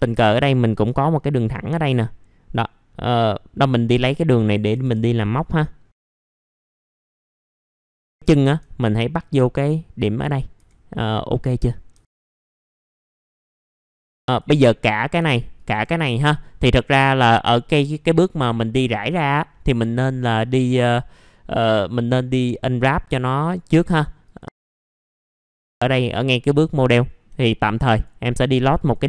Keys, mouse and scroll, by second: 1.3 ctrl+click, 1.8-3.9 scroll down 1, 3.9-4.6 scroll up 1, 4.6 scroll up 1, 5.2 click, 5.8 scroll up 1, 6.1 middle click, 6.1-6.6 scroll down 2, 6.4 middle click, 6.6 middle click, 6.9 click, 7.1 middle click, 7.4-7.8 scroll down 1, 8.0-10.5 drag, 12.3 middle click, 12.4 F4, 12.5 scroll down 1, 12.7 middle click, 13.2 alt+middle click, 13.5 alt+middle click, 13.8 alt+middle click, 14.2 click, 15.5 ctrl+click, 17.0-17.4 scroll down 1, 17.5 alt+middle click, 19.7 scroll down 1, 20.0 alt+middle click, 23.3 scroll up 1, 23.8 middle click, 24.2 click, 24.9-25.5 scroll up 3, 25.0 alt+middle click, 25.5 click, 25.7 alt+middle click, 26.5-26.9 scroll up 1, 27.0 alt+middle click, 27.7 click.